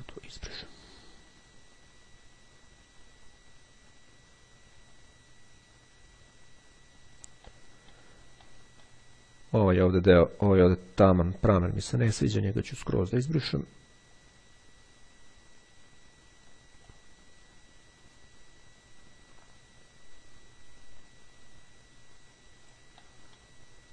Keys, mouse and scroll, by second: 7.6 middle click, 7.7 click, 8.6 click, 10.3-10.9 scroll down 1, 10.9-11.6 scroll up 1, 11.7-12.1 scroll down 2, 12.2-17.1 drag, 23.1 middle click.